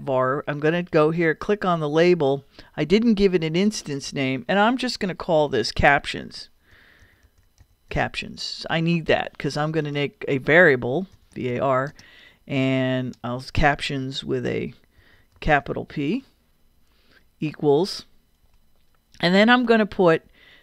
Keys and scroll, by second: 5.8-8.4 typing, 10.9-12.0 typing, 13.1-15.4 typing, 18.4 =.